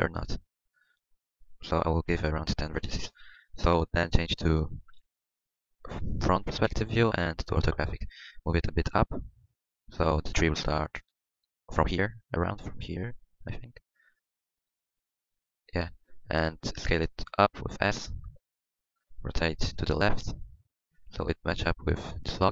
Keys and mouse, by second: 4.9 KP_1, 6.6 KP_5, 7.4-11.2 drag, 8.8 g, 13.1-16.3 drag, 13.1 g, 17.0 s, 19.9 r.